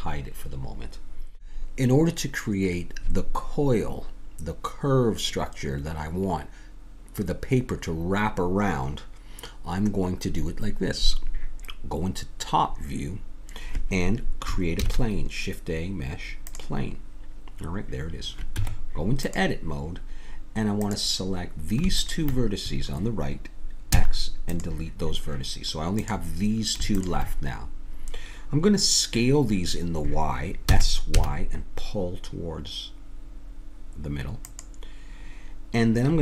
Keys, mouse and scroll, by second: 1.6 x, 14.8 shift+a, 18.5 Tab, 20.8 click, 24.0 x, 26.0-29.1 drag, 30.7 s.